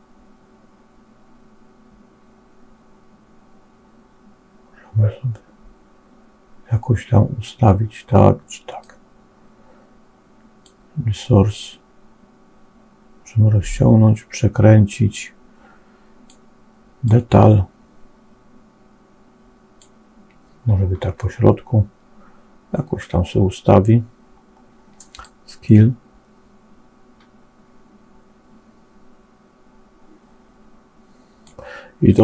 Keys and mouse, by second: 10.7-16.4 drag, 16.9-19.7 drag, 25.1-31.5 drag.